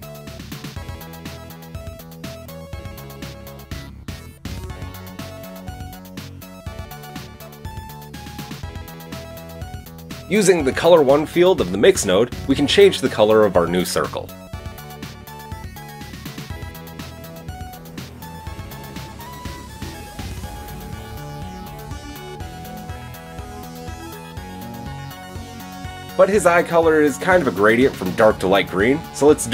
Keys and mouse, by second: 11.4-18.3 middle drag, 21.4-23.3 drag, 28.3-29.5 drag.